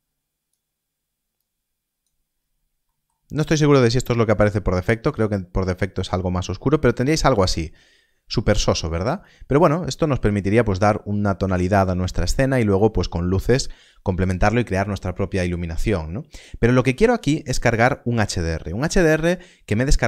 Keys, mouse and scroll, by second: 2.2 scroll up 1, 2.8 middle click, 4.1 click, 17.4 click.